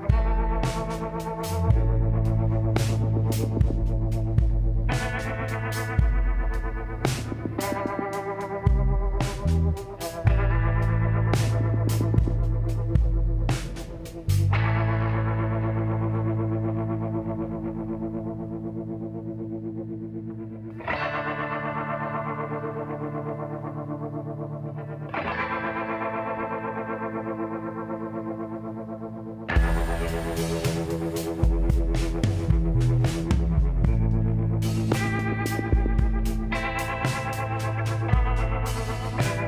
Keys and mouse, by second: 0.7 z, 1.6-4.0 drag, 4.2 z, 4.8 b, 5.6 KP_1, 11.1 e, 14.1 g, 15.4 click, 18.6 e, 21.0 g, 25.3 e, 26.7 g, 28.4 r, 30.6 click, 31.8 e, 33.7 g, 36.3 r.